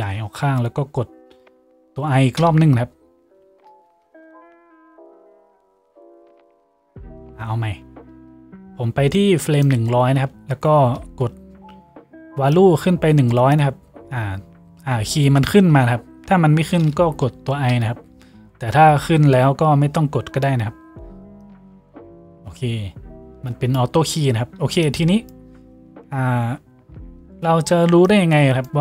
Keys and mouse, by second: 4.0 ctrl+z, 6.2 ctrl+z.